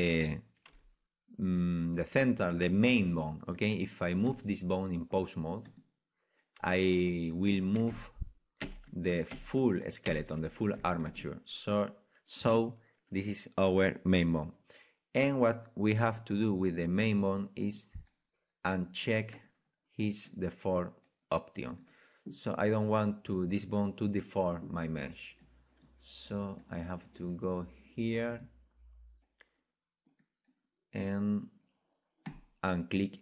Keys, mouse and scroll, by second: 0.7 g, 3.6-5.3 right drag, 4.2 g, 5.7-7.6 drag, 6.5 g, 7.5 right click, 7.7-10.6 right drag, 10.6 ctrl+z, 12.6 ctrl+z, 17.7-22.8 drag, 22.8-25.4 middle drag, 25.4-30.1 drag, 30.1-32.2 middle drag, 32.2-33.2 drag.